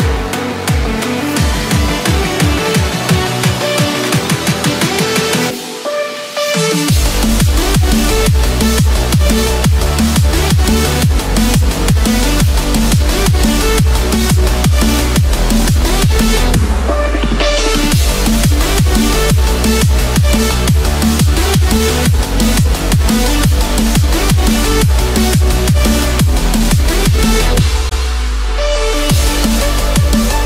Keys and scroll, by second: 20.7 ctrl+-, 20.9 ctrl+space, 21.9 ctrl+=, 22.3 ctrl+-, 22.9 ctrl+-, 23.6 ctrl+=.